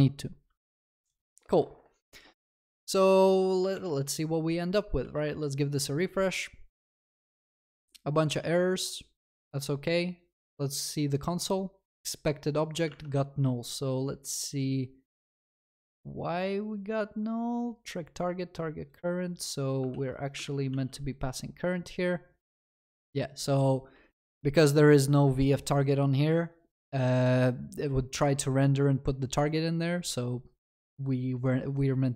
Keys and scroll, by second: 19.9 ctrl+c, 20.4 ctrl+v.